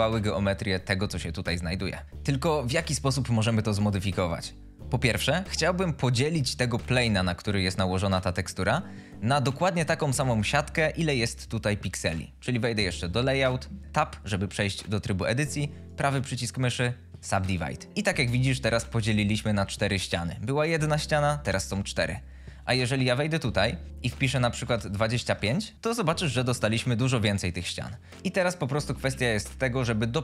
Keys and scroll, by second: 14.1 Tab, 24.8 2, 24.9 5, 25.2 Return, 28.6 2, 28.9 Page_Down, 29.3 Return.